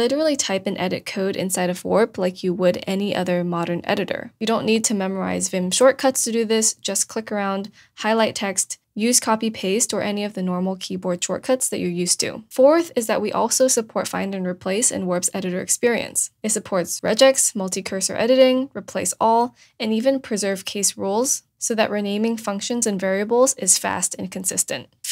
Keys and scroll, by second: 7.8 BackSpace, 10.9 super+s, 17.1 super+f, 17.4 BackSpace, 18.2 super+a, 18.3 BackSpace, 19.1 *, 20.9 Right, 20.9 BackSpace, 21.8 super+z, 22.3 super+f.